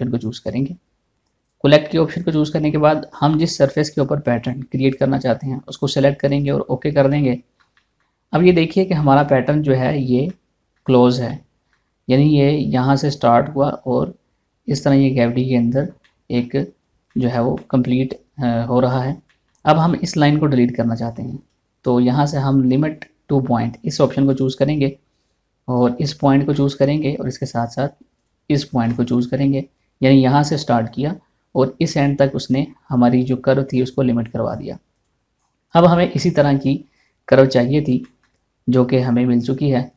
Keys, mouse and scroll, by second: 21.1 middle click, 22.0 click, 24.8 click, 27.1 shift+middle click, 28.8 click, 29.4 scroll down 1, 29.7 shift+middle click, 32.9 scroll up 1, 35.5 click, 35.9 scroll down 1, 36.3 shift+middle click, 38.0 scroll up 1, 38.6 shift+middle click.